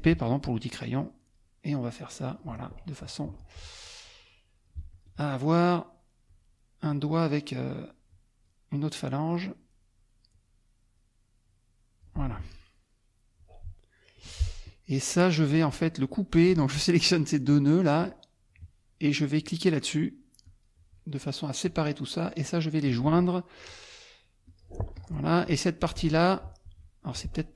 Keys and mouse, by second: 0.1 p, 1.0 click, 2.1 click, 3.2 F2, 4.0 click, 4.9 ctrl+click, 6.3 click, 8.1 click, 10.3 click, 11.4 click, 12.4 F1, 14.2 F2, 15.1 click, 16.5 click, 17.5 click, 20.4 click, 21.6 click, 22.4 click, 24.5 click, 24.9 click, 25.4 click, 26.7 F1.